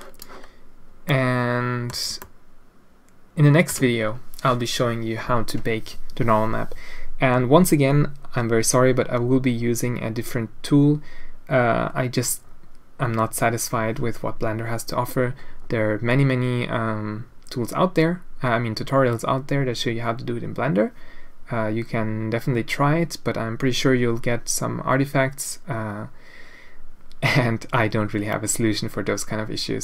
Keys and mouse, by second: 1.0 click, 2.1-3.7 ctrl+drag.